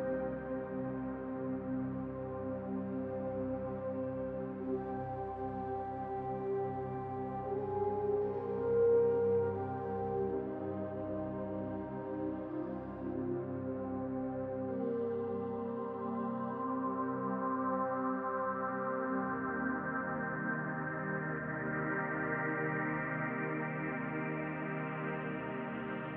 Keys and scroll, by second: 13.3-14.3 typing, 19.5-20.4 typing, 20.5 Return, 23.8 shift+b, 24.2 o, 24.8 y, 25.0 Return.